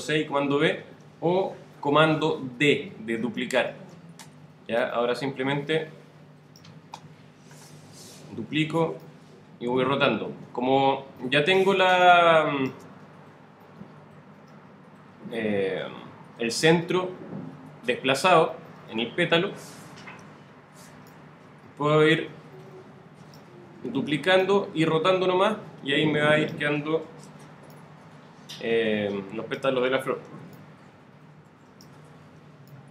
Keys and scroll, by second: 0.6 super+v, 4.3 super+w, 8.3 super+d, 20.0 super+d, 23.9 super+d, 27.1 super+d, 30.1 super+d, 32.2 super+d.